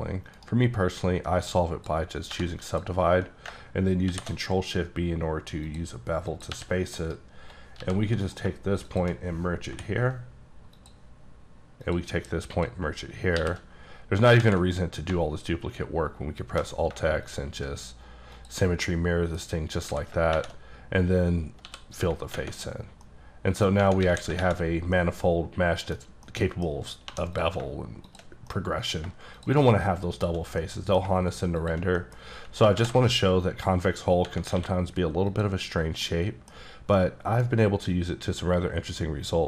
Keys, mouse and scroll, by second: 0.4 right click, 1.5 click, 2.3 1, 2.7 click, 4.1 shift+b, 5.3-5.7 scroll down 1, 5.7 click, 6.3 click, 6.5 g, 7.0 right click, 7.8 g, 8.2 right click, 8.9 click, 9.7 m, 10.8 click, 11.8 click, 12.5 click, 13.4 shift+r, 14.0-16.2 scroll down 8, 14.4 alt+x, 16.2-16.7 alt+scroll up 2, 17.3 shift+click, 18.9 middle click, 19.4-19.9 scroll up 3, 19.9 a, 20.4 shift+`, 21.3-21.7 scroll up 2, 21.7 f, 22.4 Tab, 22.7-23.1 scroll down 1, 23.1 middle click, 23.7 scroll down 1, 23.8 Tab, 24.0 a, 24.4 shift+`, 24.7 scroll down 2, 24.9 scroll up 1, 24.9 middle click, 25.9 scroll down 2, 26.3 middle click, 26.7-27.1 scroll up 2, 27.1 2, 27.4 click, 28.1 click, 28.5 middle click, 29.4 shift+click, 30.1 shift+click, 30.6 middle click, 31.6 click, 32.0 middle click, 32.1 scroll down 1, 32.3 scroll up 2, 32.8 b, 33.3-34.2 scroll up 4, 34.2 click, 34.6 q, 35.3 click, 35.7-36.1 scroll down 4, 36.1 middle click, 37.0 middle click.